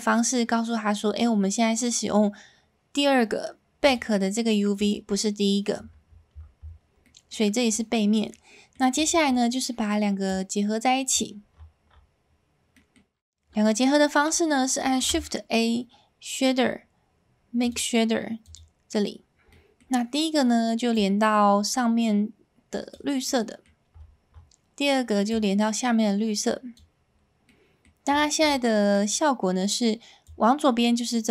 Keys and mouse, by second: 3.8 click, 4.8 click, 7.2 middle click, 8.5 middle click, 10.3 click, 14.8 s, 19.7 middle click, 23.4-25.5 middle drag, 27.4-30.8 middle drag.